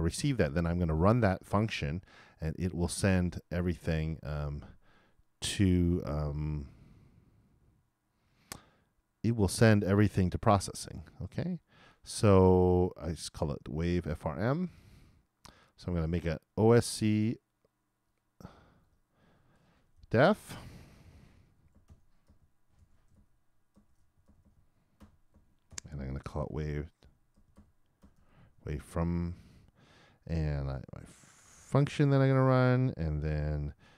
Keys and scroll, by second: 21.7 shift+Return, 21.9-26.7 typing, 31.4-33.6 typing.